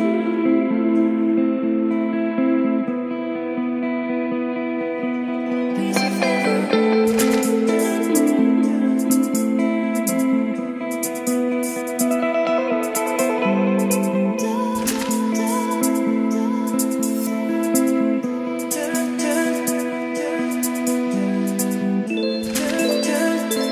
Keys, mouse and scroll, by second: 0.7 middle click, 1.5 click, 2.0 Return, 2.4-3.5 typing, 3.7 Down, 4.2 Return, 4.7-10.2 typing, 5.0 Return, 11.3 a, 12.3 Return, 12.4-13.3 typing, 13.7 Return, 17.1-17.9 typing, 18.0 Return, 18.8 ctrl+z, 19.2 ctrl+space, 20.5 Return, 20.6-21.8 typing, 22.5 ctrl+v, 23.3 ctrl+z.